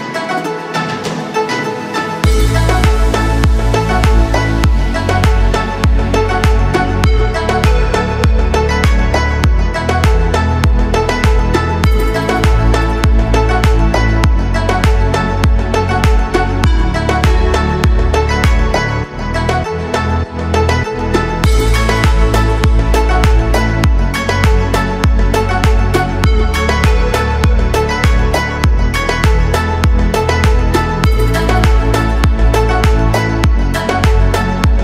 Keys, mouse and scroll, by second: 0.0 click, 0.4 shift+click, 0.7 shift+click, 1.0 shift+click, 2.2 KP_1, 3.0-4.3 shift+middle drag, 5.6 e, 7.7 click, 8.1-8.4 scroll down 1, 8.6-9.8 shift+middle drag, 10.9 e, 14.8 click, 16.4 ctrl+r, 17.7 right click, 19.1 s, 19.8 shift+y, 24.0 click, 28.9-31.3 scroll up 1, 31.3 3, 31.8 click, 32.1 shift+click, 32.6 shift+click, 32.9 shift+click.